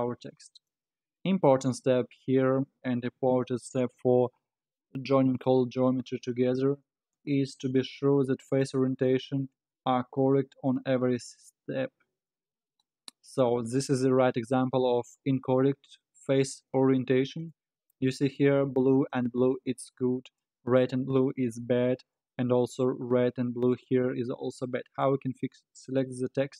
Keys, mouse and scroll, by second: 2.6-5.9 scroll up 4, 7.1-9.7 drag, 9.7-12.7 middle drag, 14.0-14.4 scroll up 4, 14.4-16.7 scroll down 4, 16.7-18.2 middle drag, 18.2-19.5 scroll down 4, 19.5-21.5 middle drag, 21.5-22.0 scroll up 7, 22.0-22.3 scroll down 5, 22.3-25.3 middle drag, 25.9 click.